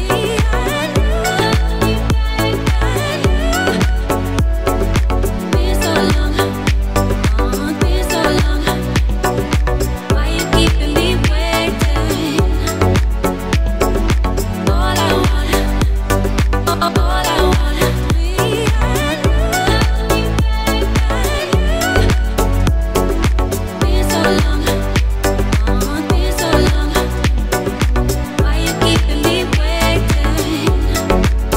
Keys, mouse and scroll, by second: 3.9 scroll down 1, 4.8 click, 10.4 right click, 11.5 click, 13.8-14.1 scroll up 1, 14.8 click, 18.8 click, 22.1 click, 23.6 click, 29.4 scroll up 1, 30.0 scroll down 1, 30.7 scroll up 1.